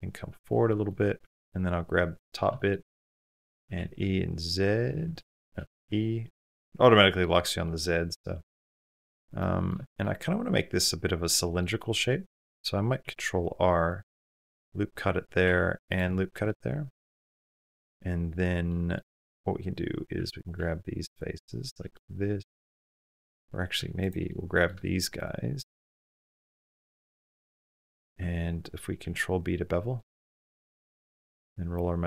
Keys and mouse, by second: 0.6 middle click, 1.3 3, 2.0 click, 2.3 shift+click, 2.6 click, 3.6 g, 5.6 e, 6.7 middle click, 7.6 middle click, 9.2 middle click, 9.7 shift+middle click, 10.7 middle click, 11.7 shift+middle click, 12.8 ctrl+r, 14.1-15.4 drag, 15.2 ctrl+r, 16.4 middle click, 17.0 middle click, 18.5 middle click, 19.9 3, 21.8 middle click, 23.1 2, 23.8 shift+click, 24.1 middle click, 25.3 shift+click, 25.7-27.8 middle drag, 28.8 ctrl+b.